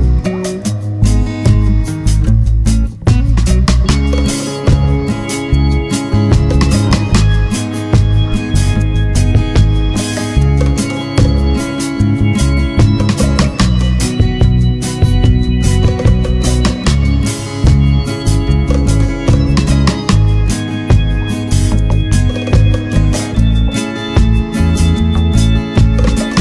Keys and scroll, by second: 4.2 ctrl+=, 7.7 ctrl+0.